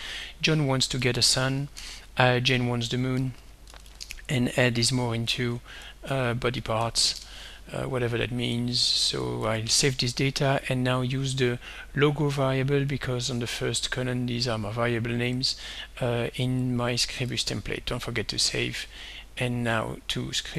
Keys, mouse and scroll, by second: 0.5-7.3 typing, 9.4 ctrl+s, 11.3 click, 13.1 shift+click, 14.5 click, 15.4 click, 17.3 ctrl+s, 19.2 click.